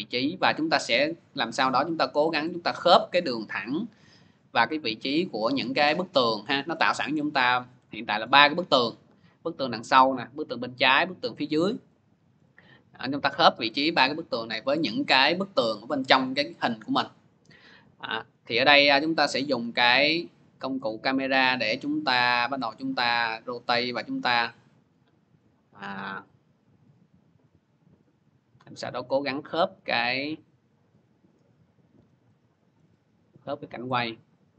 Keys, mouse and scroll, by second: 0.5 v, 1.4 scroll, 2.6-4.2 scroll, 5.7 scroll, 6.2 scroll, 7.0 scroll, 7.1 middle click, 8.2 middle click, 11.8-12.6 scroll, 11.9 middle click, 14.3 scroll, 16.8-17.2 scroll, 18.0 c, 18.7 c, 19.2 c, 19.3 middle click, 21.6 middle click, 22.9 c, 30.5-32.2 drag, 31.8 v, 32.6-33.5 scroll.